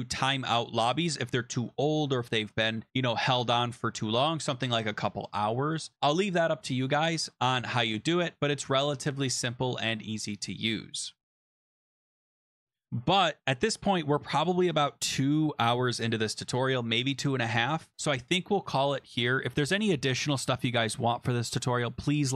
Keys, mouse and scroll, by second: 6.4-8.0 scroll, 8.1 click, 9.4 click, 11.0 click, 11.1 BackSpace, 11.2 BackSpace, 12.2 click, 12.4 click, 12.5 BackSpace.